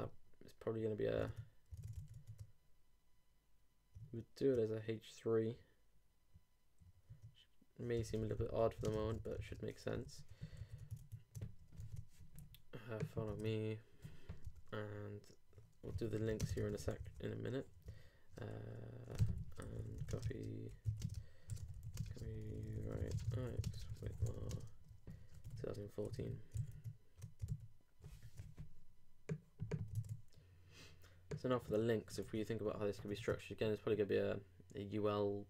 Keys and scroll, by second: 1.2 super+Tab, 4.0 super+Tab, 7.8-9.8 typing, 9.9 shift+super+;, 10.0 shift+super+Right, 10.6 super+s, 10.8 super+Tab, 11.8 super+r, 13.4 super+Tab, 16.0 alt+3, 16.3-17.2 typing, 17.8 shift+Return, 19.3-25.4 typing, 26.5 super+4, 26.7 super+Tab, 27.5 super+r, 30.0 super+Tab, 32.2 super+Tab.